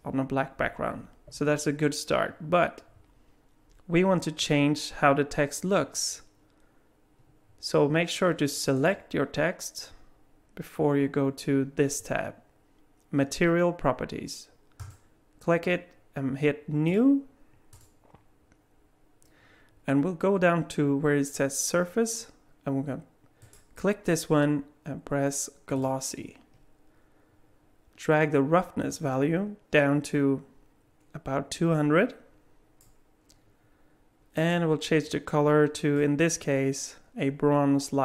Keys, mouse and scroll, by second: 8.8 click, 14.8 click, 16.9 click, 17.7 click, 23.4 click, 28.9 click, 34.4 click.